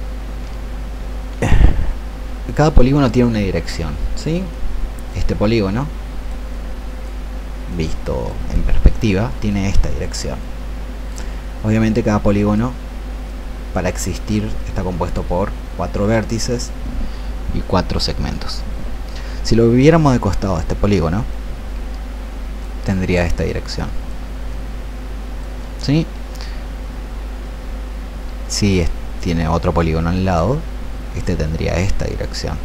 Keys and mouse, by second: 1.2 ctrl+2.